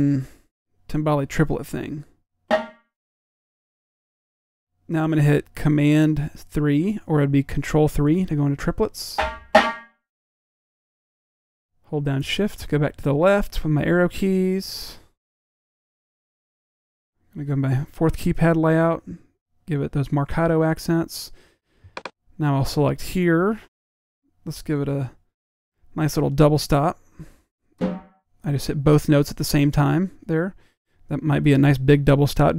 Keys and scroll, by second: 0.5 3, 16.2-16.8 typing, 18.3 typing.